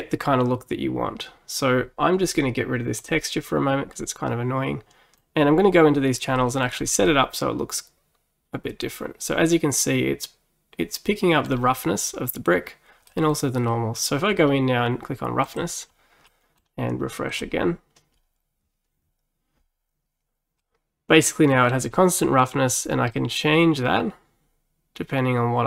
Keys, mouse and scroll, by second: 3.0 click, 4.0-5.4 middle drag, 5.4-6.0 scroll up 4, 6.4 middle click, 6.8 scroll down 2, 7.1-10.1 middle drag, 13.1-14.4 middle drag, 14.4 scroll up 2, 15.5 click, 16.3-17.4 middle drag, 17.4-20.5 drag, 20.7-23.2 middle drag, 23.2-25.6 drag.